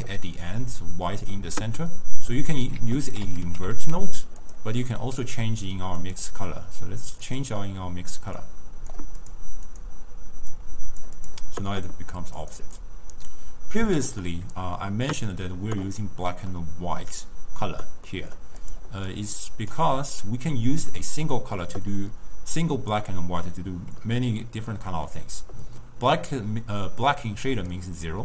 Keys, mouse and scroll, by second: 2.4 scroll down 1, 2.5 middle click, 2.8 ctrl+a, 5.0-6.1 middle drag, 6.1 click, 7.3 click, 9.3 drag, 9.7 click, 12.5 click, 12.9 click, 16.6-18.2 middle drag, 18.2-18.5 scroll up 1, 18.5 scroll down 1, 18.7 click, 19.2 click, 20.2-21.2 ctrl+middle drag, 21.2 scroll down 1, 21.4-22.0 scroll up 2, 21.4 middle click, 22.0 scroll down 1, 22.1-22.7 scroll up 2, 22.7-23.2 scroll down 2, 23.2 scroll up 1, 24.5-24.9 scroll down 3, 24.9-27.6 middle drag, 27.6 d, 27.8 click.